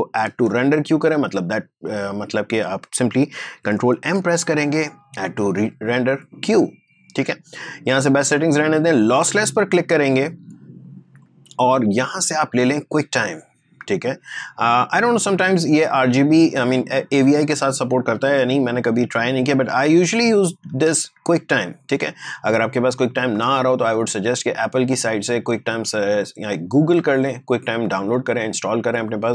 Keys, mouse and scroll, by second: 0.2 ctrl+m, 1.7 click, 4.2 ctrl+m, 5.9-9.2 drag, 9.5 click, 14.6 click, 19.1 click, 21.6 click.